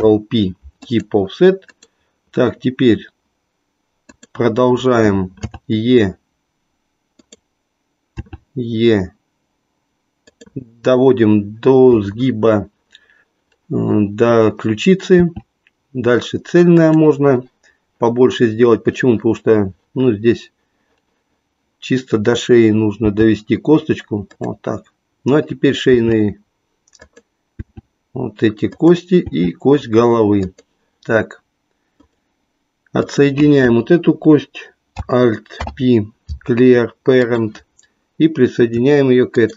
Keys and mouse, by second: 1.8 click, 4.2 click, 5.4 e, 7.3 click, 8.2 e, 15.1 e, 22.9 g, 25.9 e, 27.2 click, 27.7 e, 28.8 click, 30.5 click, 35.4 alt+p, 39.3 shift+click.